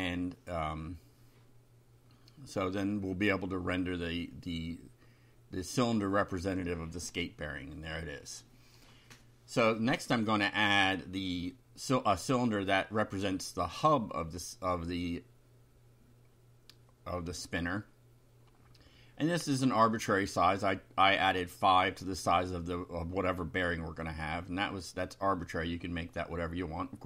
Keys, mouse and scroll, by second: 0.5-5.0 typing, 6.3 ctrl+r, 6.8 ctrl+F5, 8.8 ctrl+r, 9.9 Return, 11.7 click, 12.6 Up, 13.0 Return, 13.6 Up, 16.0 Down, 16.6 shift+End, 17.3 ctrl+c, 17.6 ctrl+Up, 18.1 ctrl+v, 18.8 Left, 21.6 shift+=, 22.2 shift+5, 24.4 Right, 25.6 Left, 25.9 Delete.